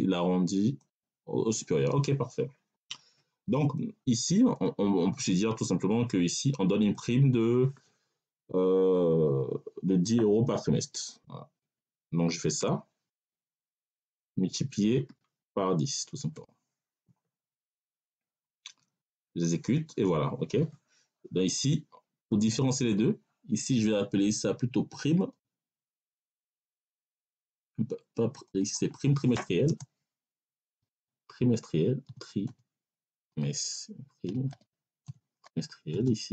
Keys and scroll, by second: 11.5 \, 12.5 BackSpace, 14.1 \, 15.3 1, 16.2 0, 29.5 space, 30.6 t, 30.8 r, 32.3-36.3 typing.